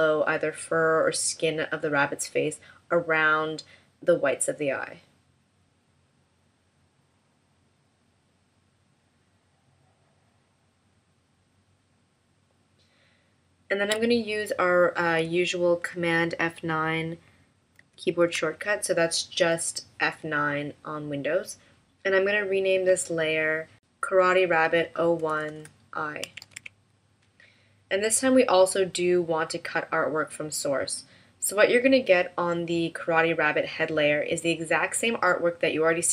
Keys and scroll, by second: 17.8 super+F9.